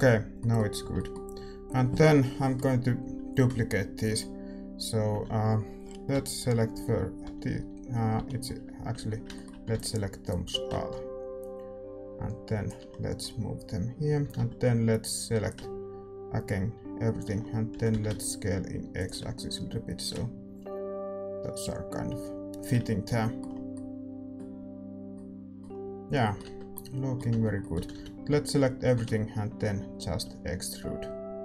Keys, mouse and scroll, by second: 5.1 a, 6.1-9.7 typing, 9.3 middle click, 10.2-11.9 drag, 12.9-17.1 middle drag, 14.2 a, 14.3 a, 15.5-17.3 drag, 17.3-20.1 middle drag, 17.7 s, 20.1-22.8 drag, 22.8 scroll up 1, 23.0-29.5 middle drag, 26.0 a, 26.4 Tab, 27.7 a, 28.2 a, 28.9 e.